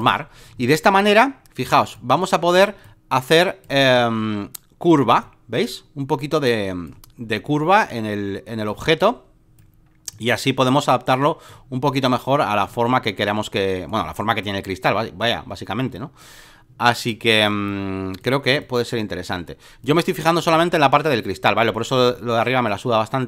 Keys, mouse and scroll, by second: 0.0 click, 1.9-23.2 drag.